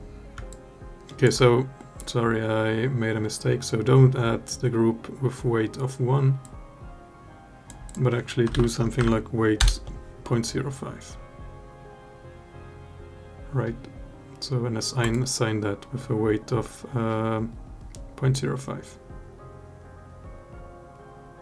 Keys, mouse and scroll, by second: 0.3 alt+click, 6.3-7.4 drag, 7.6-9.3 drag.